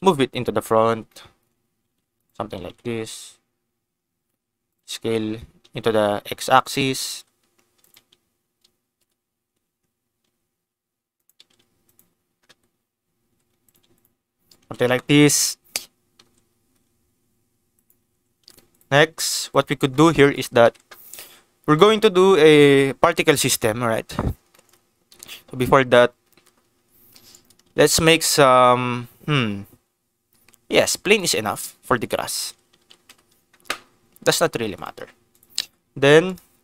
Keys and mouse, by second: 0.0 KP_Decimal, 1.0 middle click, 1.5 g, 1.6 y, 2.1 click, 2.6 KP_0, 3.9 s, 4.0 x, 4.6 click, 5.5 g, 5.6 x, 6.6 click, 7.0 s, 7.8 click, 10.2 s, 11.1 click, 11.3 g, 11.4 z, 11.8 click, 13.2 g, 13.2 z, 13.6 click, 14.6 ctrl+s, 15.0 click, 16.1 s, 16.2 x, 17.7 click, 18.0 g, 18.4 click, 18.4 x, 18.7 click, 19.1 ctrl+s, 20.2 shift+middle click, 20.7 ctrl+s, 24.5 shift+middle click, 25.1 ctrl+s, 27.3 shift+middle click, 27.6 shift+a, 32.3 r, 32.4 x, 32.7 9, 32.8 0, 33.0 Return, 34.1 s, 34.7 click, 34.9 g, 35.3 click, 35.6 Tab, 36.2-36.6 drag.